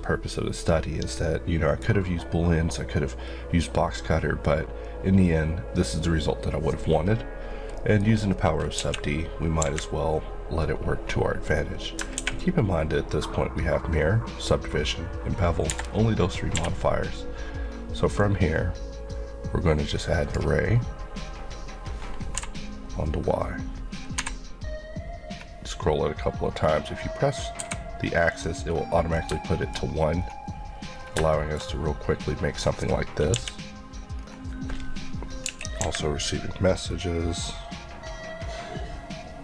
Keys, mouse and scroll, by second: 8.1 scroll down 1, 8.8 KP_1, 11.0-11.6 scroll up 1, 12.0 scroll down 2, 15.7 Escape, 16.5 Escape, 18.2 click, 22.4 y, 24.8 scroll up 1, 26.3-26.7 scroll up 1, 27.6 scroll up 1, 27.6 y, 28.3 click, 29.1 scroll down 1, 29.5 shift+middle click, 30.6 scroll up 1, 31.0 scroll down 1, 31.3 shift+middle click, 34.2-35.4 scroll up 1, 35.4 KP_1.